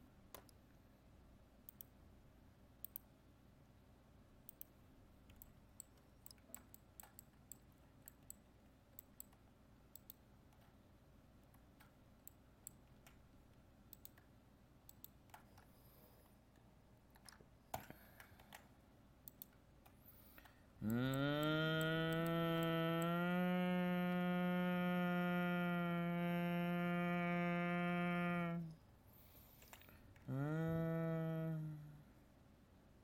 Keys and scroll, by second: 17.8 ctrl+j.